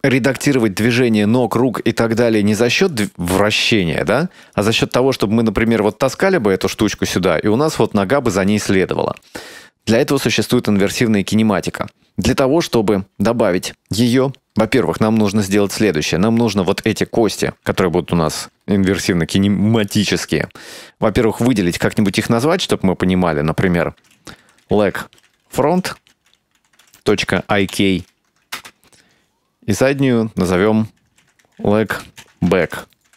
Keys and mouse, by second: 3.0 right click, 3.2 r, 5.3 right click, 14.9 Tab, 15.9 right click, 16.8 right click, 19.9 right click, 22.1-29.2 drag, 29.8 right click, 30.6-33.1 shift+drag.